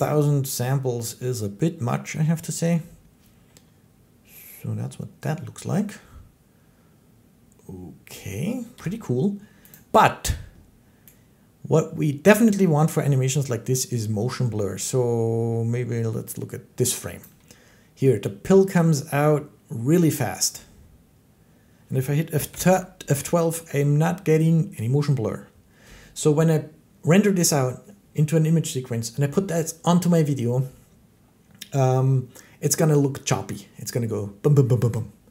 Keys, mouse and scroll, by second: 8.6 Escape, 9.6 click, 11.6-13.2 drag, 13.7 click, 17.0-22.1 drag, 22.3 F12.